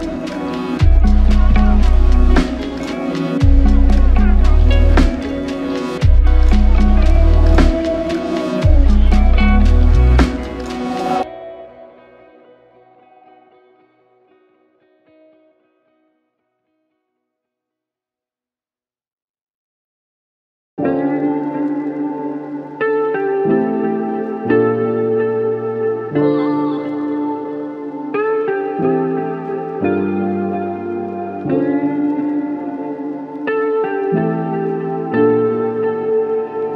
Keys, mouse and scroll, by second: 2.7 double click, 8.5 alt+click, 13.3 alt+click, 26.7 alt+click, 29.7 space.